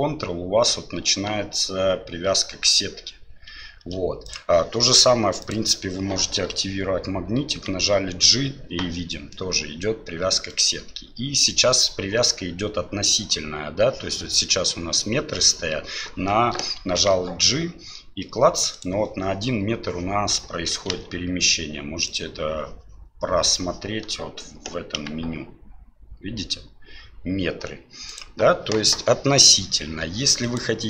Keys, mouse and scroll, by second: 7.5 g, 17.0 g, 20.9 n, 25.0 g, 30.5-30.8 drag.